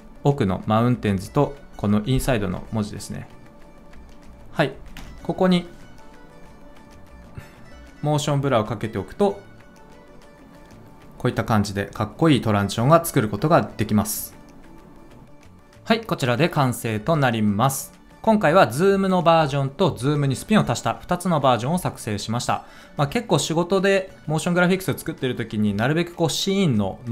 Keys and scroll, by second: 4.9 ctrl+alt+space.